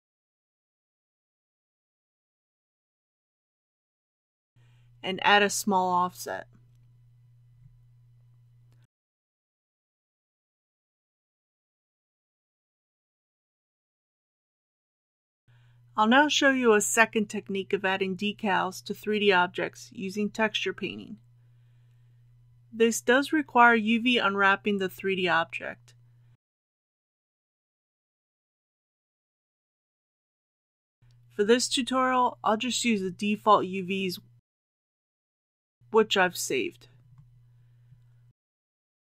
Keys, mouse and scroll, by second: 7.0 KP_Decimal, 7.4 KP_0, 8.8 KP_3, 12.1 scroll up 1, 13.1 shift+middle click, 14.3 middle click, 15.4-27.0 drag, 29.1 Tab, 36.8-38.0 drag.